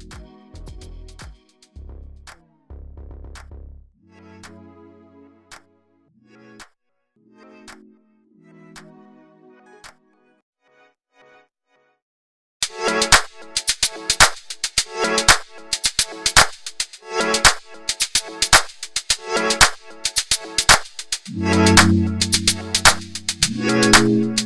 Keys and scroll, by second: 0.6 alt+space, 2.0 space.